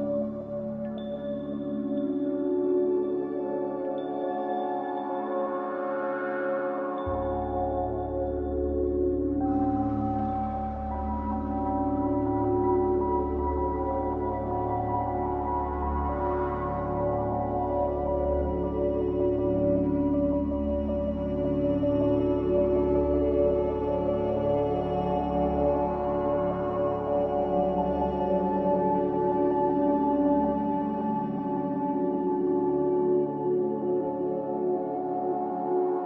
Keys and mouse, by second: 1.1 alt+shift+click, 2.2-3.4 middle drag, 4.4 ctrl+b, 16.2 click, 17.2-19.1 drag, 20.1-21.7 drag, 21.7 middle click, 22.2 middle click, 28.5 z, 30.6 z, 34.1 middle click.